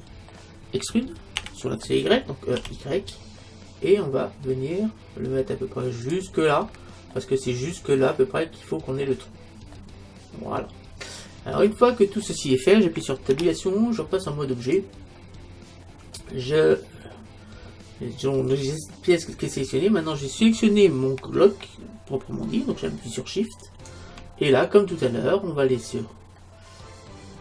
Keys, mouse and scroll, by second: 0.0 middle click, 1.4 e, 6.2-8.1 drag, 8.1 middle click, 8.4-11.7 middle drag, 13.3 Tab, 15.9 middle click, 18.7 middle click, 19.0-21.1 scroll up 1, 21.1-23.6 scroll up 1, 23.6-26.3 right drag, 26.3-27.4 middle drag.